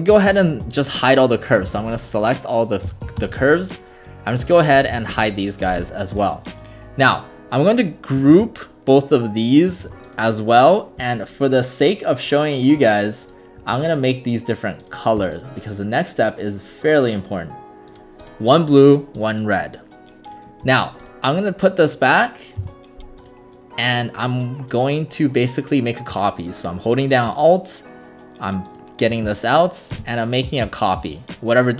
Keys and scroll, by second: 1.4-5.6 typing, 8.3 ctrl+g, 9.8 ctrl+g, 22.6 Return, 29.9 alt+space.